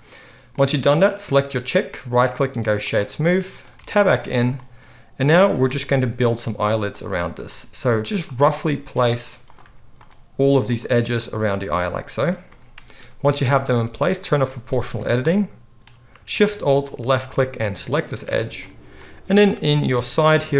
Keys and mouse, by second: 0.0 right click, 0.2-4.7 middle drag, 3.7 Tab, 4.7-14.0 right drag, 5.5 click, 5.5 middle click, 5.8 g, 7.6 g, 9.6 g, 10.7 click, 10.7 middle click, 11.6 g, 14.0 middle click, 14.2-15.6 right drag, 14.7 alt+a, 15.8 right click, 16.1-18.7 alt+shift+middle drag, 16.8 alt+shift+click, 18.7 right click, 19.5-20.5 middle drag.